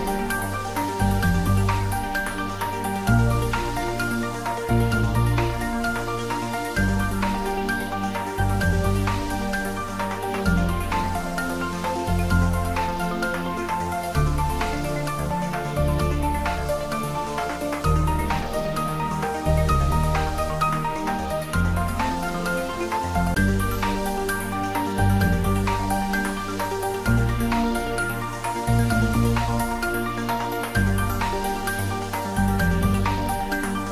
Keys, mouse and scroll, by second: 0.6 scroll up 1, 1.3 scroll down 1, 3.0 shift+d, 4.0 y, 9.2 click, 10.2 `, 10.6 3, 11.7 scroll down 1, 12.7-15.0 middle drag, 15.0-17.9 drag, 17.9 scroll up 1, 19.9 g, 20.2 y, 22.5 click, 23.6 `, 23.9 3, 24.8 scroll up 1, 26.3 g, 27.2 click, 27.6 scroll down 1, 28.7 g, 33.8 click.